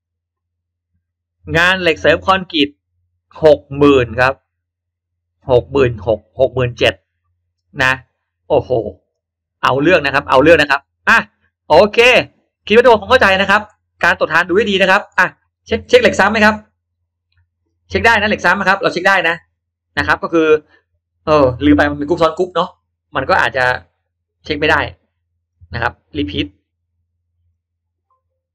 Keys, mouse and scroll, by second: 11.1 click, 12.1-13.3 drag, 13.6-14.2 scroll up 1, 14.6-15.2 middle drag, 15.4-16.0 scroll down 2, 15.5 middle click, 16.4 space, 16.8 click, 17.0 space, 17.6-18.2 scroll up 1, 18.3 click, 19.5 click, 19.9-20.2 scroll down 1, 21.2-21.5 scroll up 1, 22.1-22.5 scroll down 1, 23.1-24.2 drag, 27.5 click.